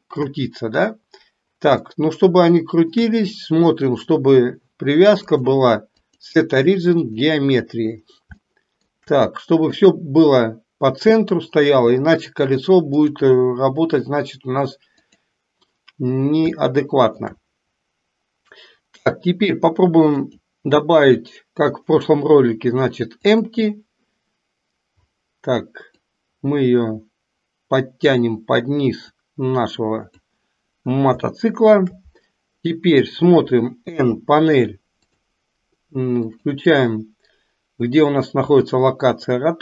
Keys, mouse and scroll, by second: 2.0-3.0 shift+middle drag, 5.3-7.4 drag, 8.5 shift+middle click, 9.8 click, 13.0-15.4 drag, 16.8-17.3 shift+middle drag, 20.2-23.5 drag, 25.9-28.1 drag, 29.0-30.3 drag, 31.3-32.0 shift+middle drag, 33.9 n, 36.3 click.